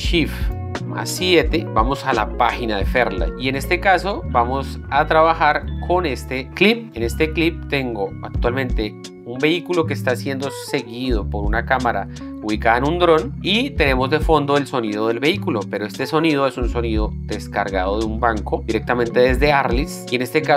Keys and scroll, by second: 1.6 shift+7.